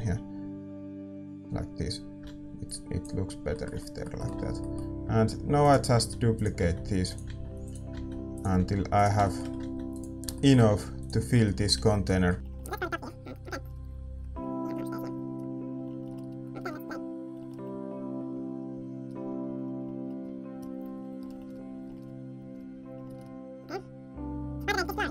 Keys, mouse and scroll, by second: 2.6 alt+a, 2.6-10.3 drag, 4.2-19.2 middle drag, 10.3 alt+d, 11.3 alt+d, 19.2 alt+a, 19.2-25.1 drag, 19.7-25.1 middle drag.